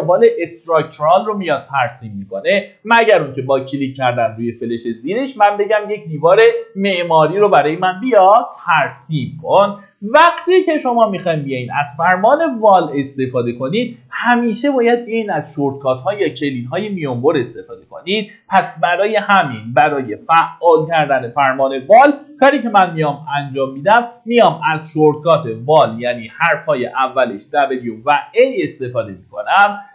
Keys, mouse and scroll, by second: 10.4 middle click, 10.6 scroll down 1, 24.6 typing.